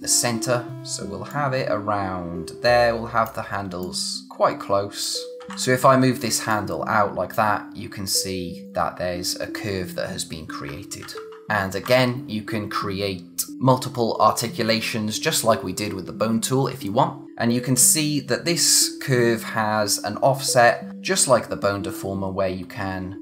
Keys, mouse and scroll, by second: 5.4 ctrl+z, 6.5 click, 11.0 ctrl+z, 17.3 scroll up 1, 20.9 scroll down 1, 21.1-21.9 scroll up 1, 22.2 click.